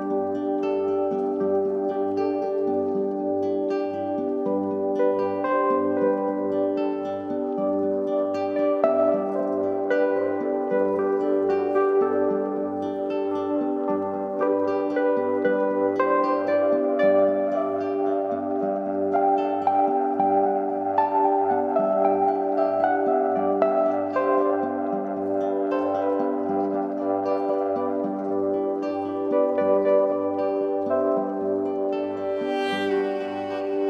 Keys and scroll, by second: 6.8 ctrl+t, 20.2 Return, 23.2 ctrl+d, 29.0 ctrl+c.